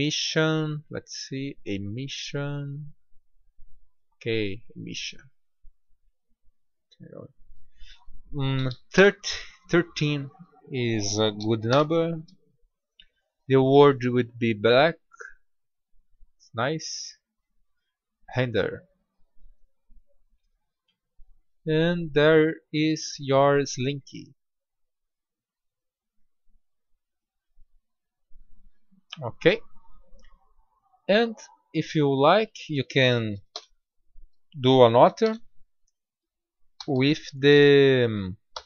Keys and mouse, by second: 0.7 middle click, 2.3-3.0 drag, 5.8-9.2 drag, 9.5-12.6 drag, 12.6 middle click, 13.3-16.0 drag, 16.9-18.0 drag, 18.5 click, 18.9-19.6 middle drag, 20.2 middle click, 21.1-22.2 middle drag, 22.2-23.6 drag, 23.8 click, 30.8 click, 33.9 shift+d, 36.8 r, 38.4 g.